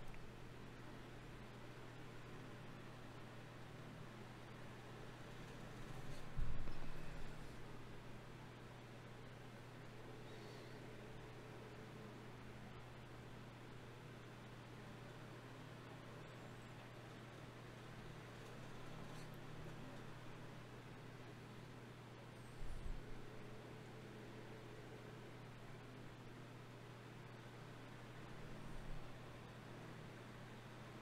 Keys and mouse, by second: 0.6 KP_1, 3.1-4.3 middle drag, 4.3 shift+Tab, 6.9 shift+Tab, 7.3 shift+Tab, 11.1 KP_1, 11.5 KP_5, 12.3 click, 13.0 shift+a, 19.4 F6, 29.4 s, 30.9-31.0 drag.